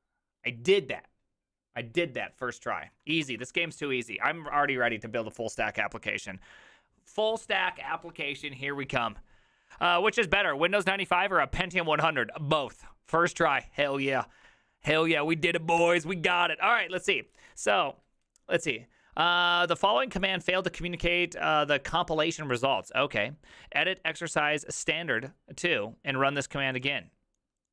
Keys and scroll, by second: 3.2 alt++, 15.8 alt+{.